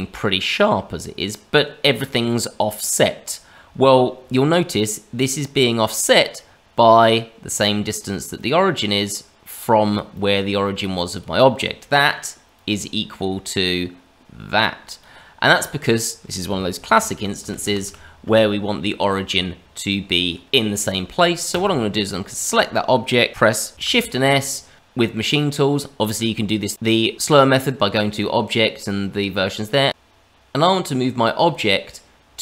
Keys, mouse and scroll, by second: 1.5 scroll down 1, 1.9 click, 5.5 click, 6.9 click, 8.3 click, 10.1 click, 12.5 click, 13.7 click, 17.1 ctrl+z, 17.4 ctrl+z, 17.6 ctrl+z, 17.8 ctrl+z, 18.7-19.2 scroll up 2, 19.2 Tab, 20.4 Tab, 20.4 click, 21.5 click, 22.3-22.8 scroll down 1, 23.7 shift+s, 29.9 shift+s.